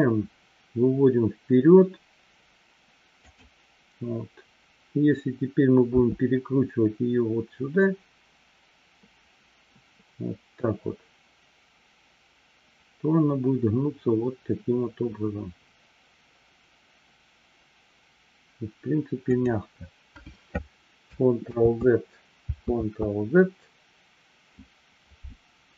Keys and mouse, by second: 22.0 ctrl+z, 23.1 ctrl+z.